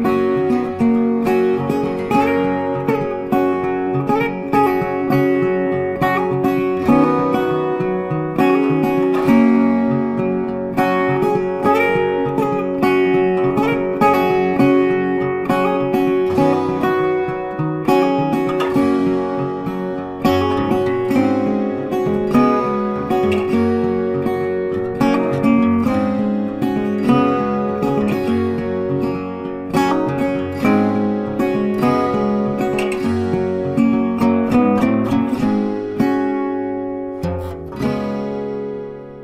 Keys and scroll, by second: 16.2 Delete, 17.7 ctrl+d, 32.8 ctrl+t.